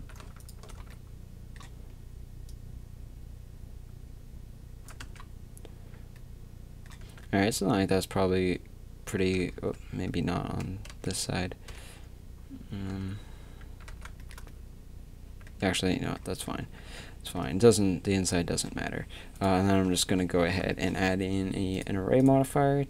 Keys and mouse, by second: 0.0 click, 0.0 z, 0.0 a, 0.8 z, 2.6-4.9 drag, 5.0 Tab, 7.0 a, 9.6 Tab, 10.9 KP_3, 11.7 KP_1, 12.9 z, 13.6 a, 13.9 z, 16.3 Tab, 16.9 a, 17.5 a, 19.5 click, 19.9 KP_3, 20.2 z.